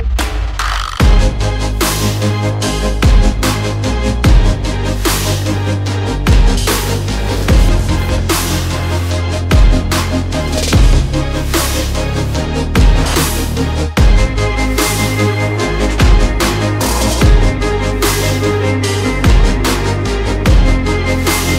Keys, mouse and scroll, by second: 0.7 click, 1.0 click, 3.4 click, 5.4-7.6 typing, 8.6 Tab, 10.6 Tab, 10.8 Tab, 11.1-12.0 typing, 12.3 Return, 15.1 click, 16.4 click, 17.0 click, 17.6-19.0 typing, 20.0 click, 20.2 click.